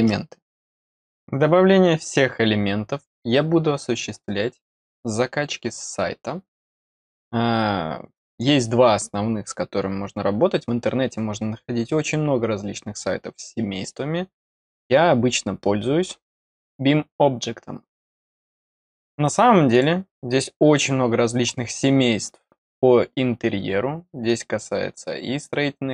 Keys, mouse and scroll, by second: 19.6 click, 20.5 scroll up 1, 23.0-23.7 scroll up 3, 24.2 click.